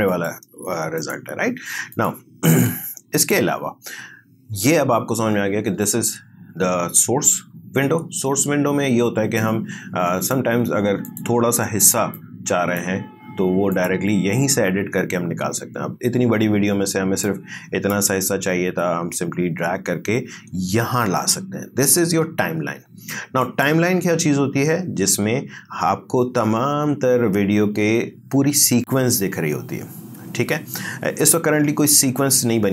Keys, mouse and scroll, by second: 2.5 space, 3.2 click, 9.4-13.7 drag, 17.2-20.5 drag, 23.4 click.